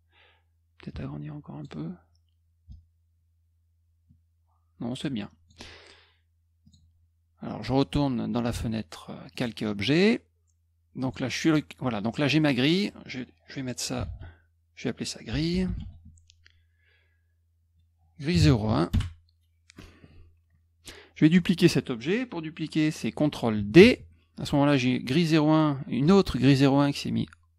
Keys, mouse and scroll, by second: 0.8 ctrl+click, 2.7-5.4 ctrl+drag, 5.5-6.2 scroll up 1, 6.6 click, 7.2 scroll up 1, 9.3 click, 11.0 click, 11.9 click, 12.2 click, 13.7-16.2 typing, 18.9 Return, 23.7 ctrl+d.